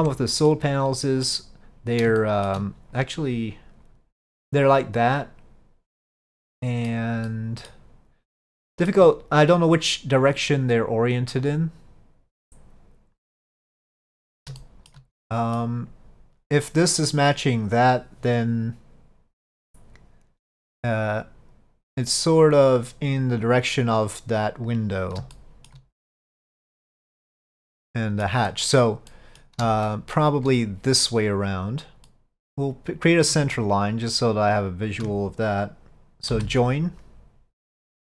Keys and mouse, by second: 0.6 middle click, 2.3 shift+middle click, 6.2 middle click, 7.3 middle click, 8.6 shift+middle click, 13.8 middle click, 14.7 shift+middle click, 15.2 middle click, 25.4 shift+middle click, 26.4-28.3 middle drag, 28.6 middle click, 29.2 middle click, 30.0 shift+middle click, 31.9 middle click, 32.8 click, 34.6 shift+click.